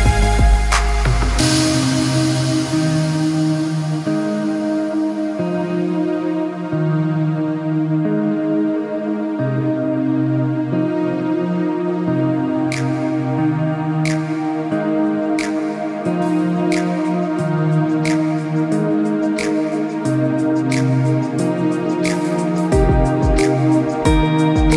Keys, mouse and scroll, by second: 0.5 click, 3.3 alt+scroll down 1, 4.1 scroll down 1, 4.4 click, 5.4 right click, 5.9 click, 7.2 space, 8.5 click, 9.3 click, 11.4 click, 20.1 click, 22.5-23.4 scroll up 1, 24.1-24.7 scroll up 1.